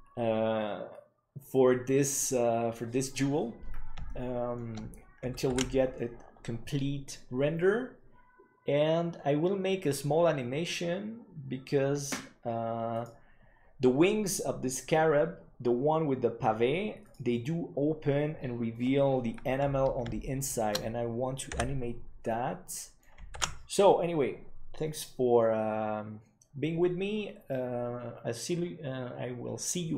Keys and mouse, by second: 17.3-18.4 drag, 20.2-20.5 shift+middle drag, 21.4 n, 22.2 middle click, 24.1 ctrl+s.